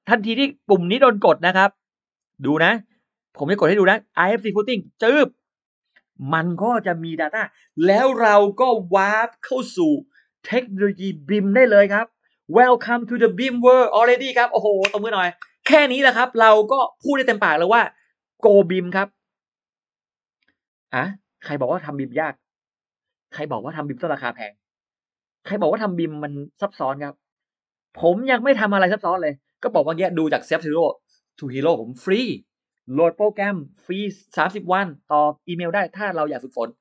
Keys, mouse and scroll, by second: 1.4-1.8 scroll up 1, 5.3 click.